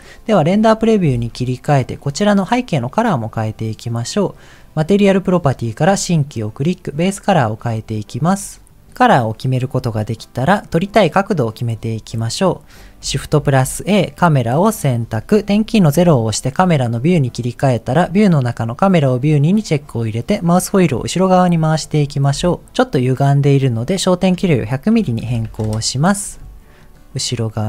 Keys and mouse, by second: 1.2 ctrl+s, 2.2 click, 3.5 click, 5.6 click, 6.6 click, 10.0-11.1 middle drag, 13.3 shift+a, 15.9 KP_0, 18.0 click, 19.0 click, 22.5 shift+middle click, 24.3-25.7 drag, 25.4 KP_0, 26.8-27.6 ctrl+middle drag.